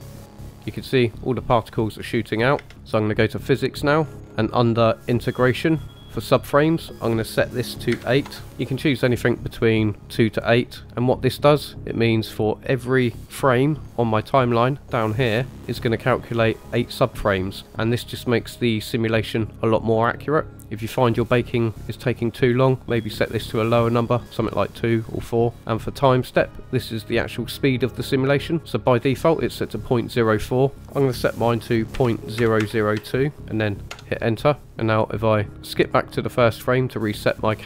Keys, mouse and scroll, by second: 3.3 click, 3.3 space, 3.9-5.3 scroll down 5, 5.9 click, 6.6-8.3 drag, 11.7 click, 15.2 Right, 28.6-33.9 drag, 32.6 KP_0, 35.8 click.